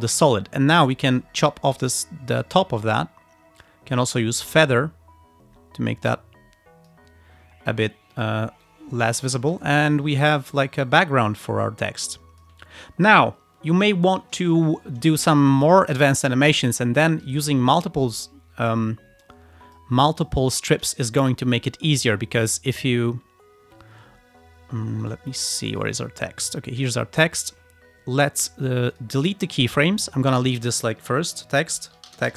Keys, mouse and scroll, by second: 1.2-3.8 drag, 4.6-7.1 drag, 8.2 click, 8.7 click, 9.4 space, 10.2 space, 10.5-12.6 drag, 15.1 ctrl+scroll down 2, 15.6 ctrl+click, 17.3 click, 18.3-20.0 drag, 20.2 click, 20.7 ctrl+click, 21.1 ctrl+scroll up 2, 21.5 ctrl+click, 23.2 scroll down 2, 23.8 scroll up 2, 25.1 click, 25.8 click, 26.5 click, 27.2 scroll down 2, 29.0 click, 29.8 click, 30.3 click, 31.5-32.3 typing.